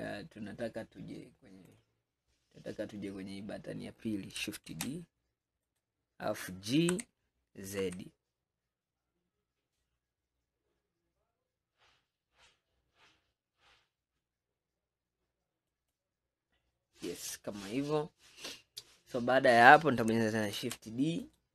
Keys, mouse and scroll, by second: 1.7 click, 2.7-4.8 scroll up 1, 4.8 shift+d, 7.0 g, 17.5-18.5 scroll down 3, 18.5-19.0 scroll down 2, 19.0 scroll up 2, 20.6 shift+d.